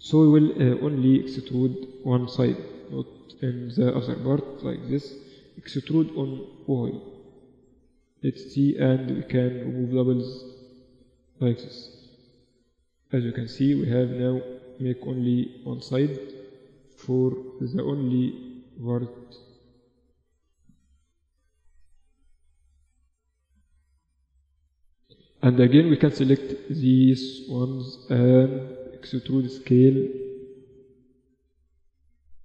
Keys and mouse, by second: 0.4-2.2 drag, 1.6 b, 3.8-5.0 middle drag, 5.2 e, 8.0 a, 8.1 a, 8.4 w, 11.6 KP_2, 11.7 KP_2, 11.8 KP_2, 12.8 z, 13.3 Tab, 14.4 KP_1, 14.6 z, 15.9 Tab, 18.3 middle click, 18.6 z, 19.3 z, 20.2 a, 22.2 z, 25.4-27.2 middle drag, 27.2 z, 27.7 z, 28.8 e, 30.8 KP_7, 31.4 z.